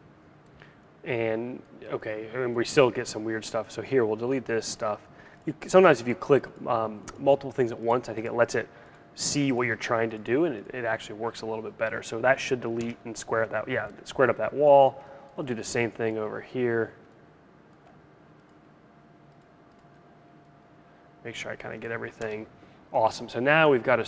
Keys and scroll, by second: 12.4 BackSpace, 21.7 BackSpace.